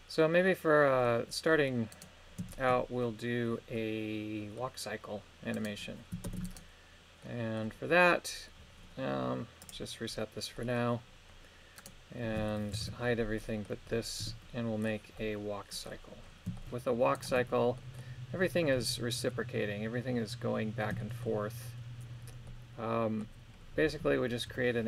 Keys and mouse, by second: 0.4 middle click, 1.8 right click, 2.5 shift+middle click, 3.7 middle click, 5.5 right click, 6.2 ctrl+Tab, 6.5 right click, 7.1 middle click, 9.7 click, 10.5 middle click, 11.7 right click, 12.8 shift+h, 13.3 middle click, 14.1 KP_3, 15.1 middle click, 16.5 shift+middle click, 17.1 shift+right click, 17.8 middle click, 18.7 KP_3, 21.0 shift+middle click, 22.4 middle click, 24.5 i.